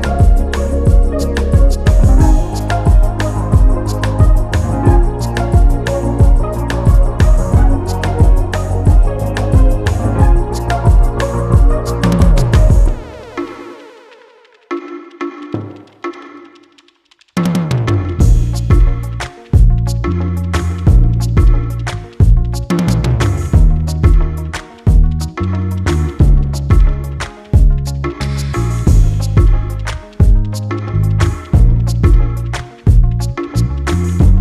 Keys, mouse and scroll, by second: 0.4 shift+d, 3.0 g, 4.1 click, 4.4-4.8 scroll up 2, 4.8 click, 5.3 s, 6.4 Tab, 6.5 click, 6.9 g, 8.2 ctrl+r, 9.3 click, 9.8 g, 10.9 e, 12.6 click, 13.3-13.9 scroll down 6, 13.5 Tab, 13.9 scroll up 1, 14.5 click, 14.9 click, 15.0 scroll up 1, 15.0 click, 15.8 click, 16.5 ctrl+z, 16.6 ctrl+z, 16.7 ctrl+z, 16.9 ctrl+z, 17.1 scroll up 1, 17.3-17.7 scroll down 3, 17.8 click, 18.4 click, 18.6 click, 19.0 e, 20.6 Tab, 20.9 click, 21.6 click, 21.8 Tab, 21.9 scroll down 2, 22.1 scroll up 1, 22.2 Tab, 22.7-23.3 drag, 23.7 click, 23.9-24.6 scroll down 2, 24.6 shift+d, 25.5 scroll up 3, 25.7 s, 26.8 scroll up 2, 27.0 g, 27.4-27.7 scroll down 4, 27.7 click, 28.0-28.3 scroll up 1, 28.3 g, 30.6 s, 30.7 g, 32.4 click, 32.6 scroll up 1, 32.7-33.3 scroll down 10, 33.3-34.1 scroll up 1, 34.1 click.